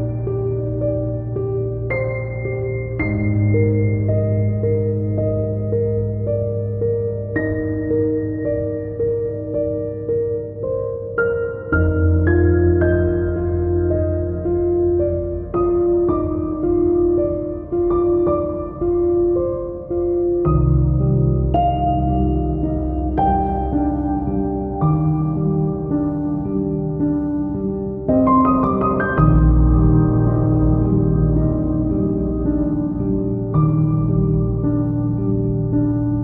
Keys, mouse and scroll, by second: 0.3-2.1 drag, 1.0 g, 1.2 Escape, 1.9-2.7 scroll down 6, 2.2 shift+middle click, 2.4 click, 3.2-3.7 drag, 3.7 shift+middle click, 4.1 KP_1, 4.3 shift+a, 4.9 Escape, 5.0 click, 5.6-8.0 typing, 5.8 middle click, 7.0-7.4 drag, 7.6 click, 7.7 Return, 7.9 middle click, 8.1 click, 8.6 click, 9.0 middle click, 9.4 middle click, 9.7 click, 9.8 Tab, 9.8 middle click, 10.1 KP_1, 10.2 ctrl+r, 10.4 2, 10.4 click, 10.6 g, 10.8 g, 11.1 ctrl+click, 11.1 ctrl+r, 11.3 Escape, 11.4 ctrl+r, 11.5 Escape, 11.6 ctrl+r, 11.6 Escape, 11.8 shift+middle click, 11.9 2, 12.1 alt+click, 12.2 g, 13.0 click, 13.1 shift+middle click, 13.2 alt+click, 13.3 g, 13.6 shift+click, 13.7 middle click, 14.1 click, 14.2 middle click, 14.3 y, 14.6 click, 15.2 click, 15.3 shift+middle click, 15.4 scroll down 1, 15.9 click, 16.4 scroll down 1, 16.6-17.1 middle drag, 17.0 scroll up 1, 17.1 click, 17.2 scroll down 1, 17.6 ctrl+j, 17.8 middle click, 18.1 click, 18.6 shift+click, 19.2 middle click, 19.3 scroll up 1, 19.6 scroll down 1, 20.1 KP_Divide, 20.2 click, 20.4 middle click, 20.5 scroll down 1, 20.6 KP_1, 20.7 shift+middle click, 20.9 scroll up 1, 21.6 scroll up 1, 21.6-22.3 scroll down 2, 21.7 shift+middle click, 21.8 click, 21.9 KP_1, 31.3 z, 31.4-31.9 scroll up 4, 31.5 shift+middle drag, 31.9 shift+click, 32.1 s, 32.5 shift+click, 32.7 s, 33.2 Escape, 33.2 scroll down 2, 33.3 shift+click, 33.5 scroll up 2, 33.6 scroll down 2, 33.6-36.2 middle drag, 33.9-36.2 typing, 34.6 click, 34.9 click, 35.0 scroll up 2, 35.6 click, 35.9 scroll down 1.